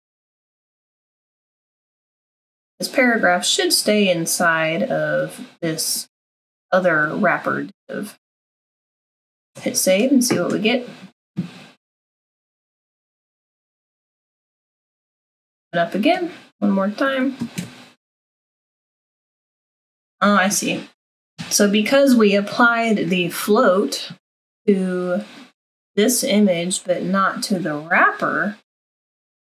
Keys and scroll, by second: 9.4 ctrl+s.